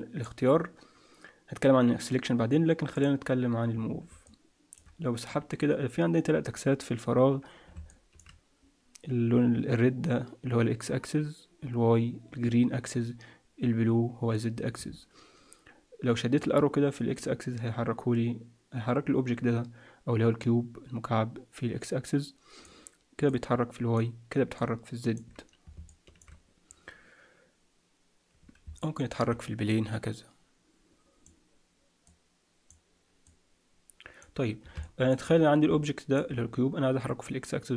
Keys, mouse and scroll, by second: 2.9 click, 4.2 middle click, 6.3-6.9 scroll down 2, 6.9-7.6 scroll down 3, 7.9 shift+middle click, 16.3 click, 23.3 click, 24.5 click, 25.9 shift+middle click, 28.7 middle click, 29.7 click, 32.0 click, 34.7 shift+middle click, 35.4 scroll up 1, 35.8 middle click, 36.3-36.9 scroll up 1, 36.9-37.7 scroll up 4.